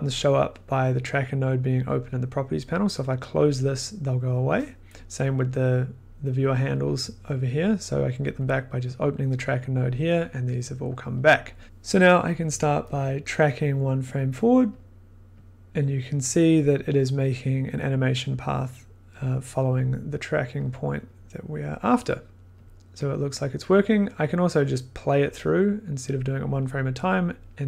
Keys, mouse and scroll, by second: 3.3-8.2 drag, 11.6 scroll, 11.6-13.5 middle drag, 14.1 click, 14.7 click, 14.7 click, 15.4 click, 16.3 click, 20.6 click, 21.7 click, 22.2 click, 22.5 click, 22.6 click, 23.3 click, 25.3 click.